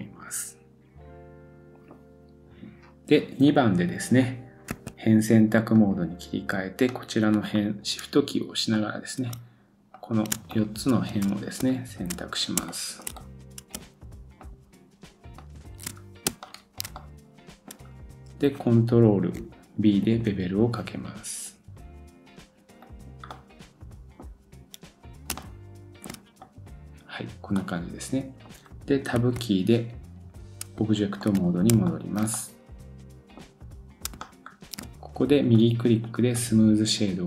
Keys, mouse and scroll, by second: 5.8 click, 5.9-6.9 middle drag, 6.9 click, 8.3-8.7 scroll down 1, 8.7 middle click, 9.9 shift+click, 10.5 middle click, 11.1 shift+scroll down 1, 11.8-12.5 shift+scroll down 3, 12.7 shift+middle click, 13.1 middle click, 14.4-15.6 shift+drag, 15.6-25.3 shift+middle drag, 16.0 scroll down 1, 17.9-19.3 scroll up 1, 20.0 ctrl+b, 24.2-25.3 scroll up 1, 25.4-26.4 shift+middle drag, 26.4 click, 26.5-30.8 middle drag, 27.1 scroll down 1, 29.2 Tab, 31.5 middle click, 31.8 shift+scroll up 1, 32.2-34.1 middle drag, 34.2-35.5 shift+middle drag, 35.5 right click.